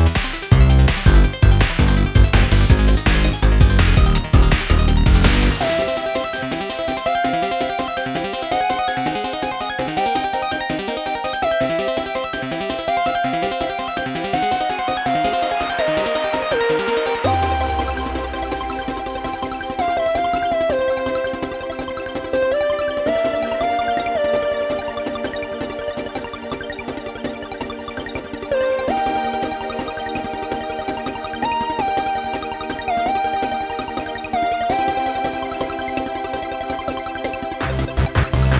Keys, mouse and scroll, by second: 0.6 ctrl+r, 3.7 click, 5.0-8.1 middle drag, 8.6-9.8 drag, 9.8 scroll up 1, 10.5 click, 11.4-14.4 middle drag, 16.4-17.5 middle drag, 17.5 ctrl+r, 19.5 click, 19.9-21.8 middle drag, 21.8 k, 33.6 scroll down 2, 34.4 scroll down 2, 34.9-38.3 scroll up 5.